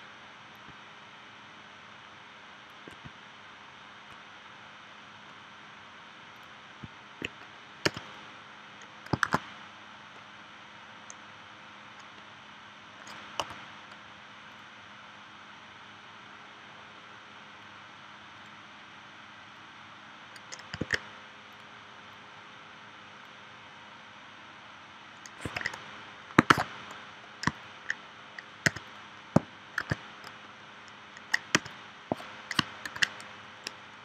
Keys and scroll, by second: 7.9 v, 9.3 shift+w, 13.4 a, 20.8 super+z, 25.4 super+z, 26.5 shift+w, 28.7 v, 29.8 shift+w, 31.5 v, 32.8 super+2.